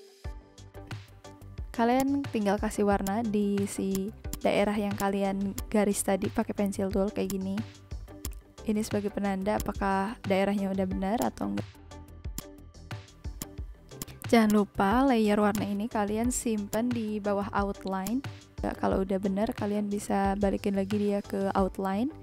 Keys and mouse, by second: 1.8 v, 1.9 click, 3.0 click, 3.9 click, 7.2 click, 8.2 click, 9.5 click, 11.1 click, 12.3 click, 13.3 click, 15.5 click, 16.7 click, 18.0 click.